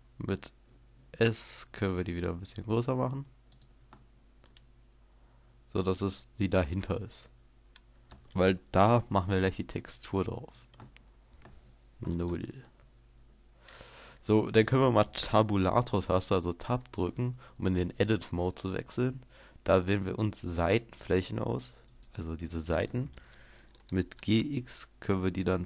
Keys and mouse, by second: 3.6-4.6 drag, 4.6-6.3 middle drag, 9.8 s, 10.6-12.3 drag, 12.3 KP_0, 17.1 Tab, 20.5-24.1 drag, 24.1 g.